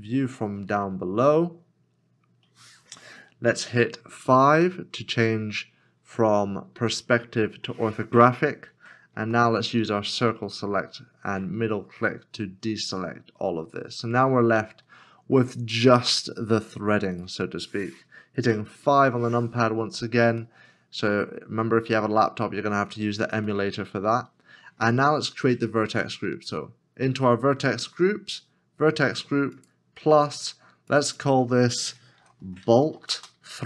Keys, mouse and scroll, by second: 1.1 scroll down 1, 1.6 scroll up 1, 2.3 scroll down 1, 5.1 KP_5, 9.2 c, 10.6 middle click, 19.0 KP_5, 20.7 middle click, 22.8 scroll down 1, 23.6 middle click, 31.8 middle click, 32.2-33.6 typing.